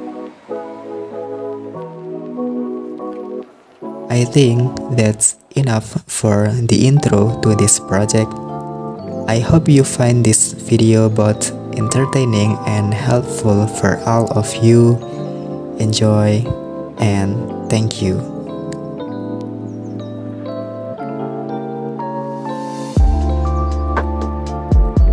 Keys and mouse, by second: 0.4 click, 0.6 shift+click, 0.9 s, 3.1 click, 5.1 super+s, 5.3 click, 6.3 shift+click, 6.4 shift+click, 6.7 shift+click, 7.1 shift+click, 7.6 shift+click, 8.1 shift+click, 8.7 shift+click, 9.6 shift+click, 9.7 shift+click, 9.9 shift+click, 10.0 shift+click, 10.4 shift+click, 10.6 shift+click, 11.4 shift+click, 11.6 shift+click, 11.9 shift+click, 12.0 shift+click, 12.1 shift+click, 12.2 shift+click, 12.5 shift+click, 13.2 shift+click, 13.8 middle click, 14.0 shift+middle click, 14.2 middle click, 14.5 shift+middle click, 14.8 e, 16.1 middle click, 17.0 shift+right click, 17.4 shift+right click, 17.8 middle click, 19.6 click, 19.8 middle click, 19.9 Tab, 20.1 middle click, 20.8 middle click, 21.0 super+s, 21.2-22.4 middle drag, 23.1 middle click, 23.7 click, 24.0 click, 24.5 super+s, 24.6 click, 24.8 middle click, 25.0 click.